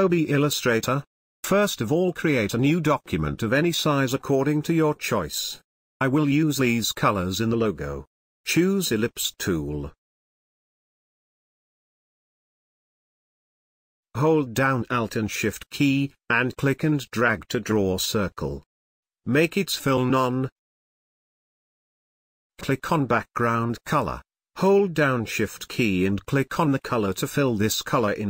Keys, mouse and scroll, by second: 4.7 ctrl+v, 6.9-14.3 drag, 14.3-20.7 alt+drag, 21.9 click, 24.4 click, 27.7 click, 27.8 click.